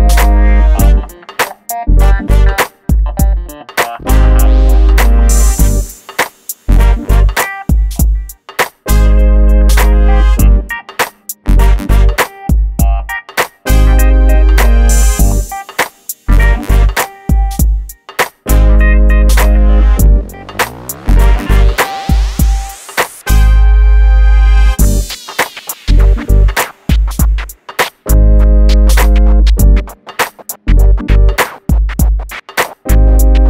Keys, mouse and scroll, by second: 2.2 space, 2.4 click, 3.3-4.8 scroll down 1, 4.8 l, 7.4-8.5 scroll up 1, 8.5 click, 20.7 shift+click, 23.3 click, 28.2 shift+click, 28.9 click, 29.4 scroll down 1, 30.3 click, 31.1 g, 31.3 scroll down 1, 31.6 shift+middle click, 32.0 scroll up 1.